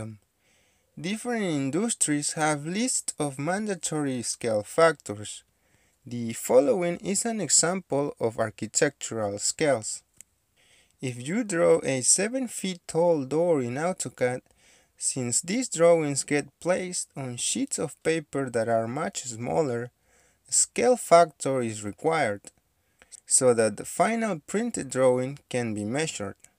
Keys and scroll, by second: 4.5 Escape.